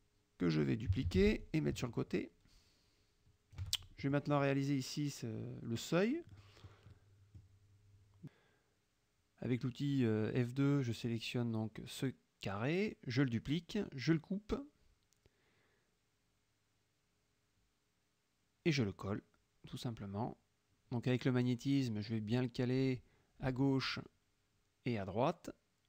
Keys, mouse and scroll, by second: 1.1 ctrl+d, 1.5-3.8 ctrl+drag, 4.1 ctrl+shift+click, 6.4 click, 9.2 F2, 9.4 click, 11.8 F1, 13.0 ctrl+d, 14.4 ctrl+x, 15.6 click, 19.1 ctrl+v, 19.9-20.5 drag, 20.5 middle click, 22.2-24.0 drag, 24.2 middle click, 25.2-25.8 drag.